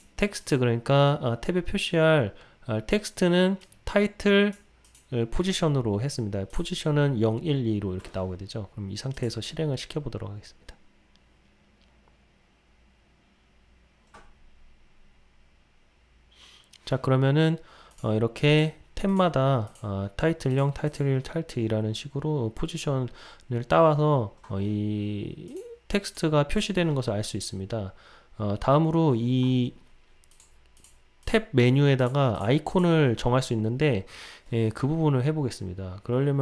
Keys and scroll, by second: 9.3 ctrl+r.